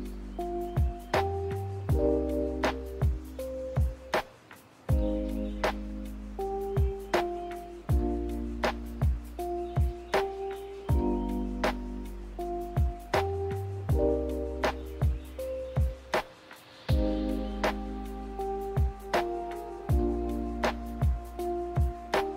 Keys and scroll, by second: 10.1 n, 11.5 a, 18.3 ctrl+z, 20.1 b.